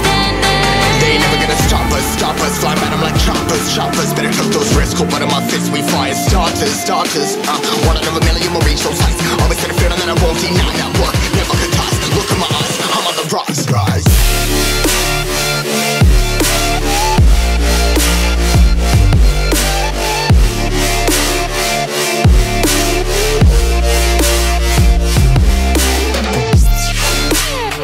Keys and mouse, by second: 4.4 click, 7.2-8.3 drag, 8.8-9.9 drag, 10.9 click, 12.1 click, 13.4 click, 14.9 click, 16.2 middle click, 17.1-18.1 drag, 21.8 click, 23.4 ctrl+c, 24.4 click, 25.2 ctrl+v, 26.0-27.8 drag.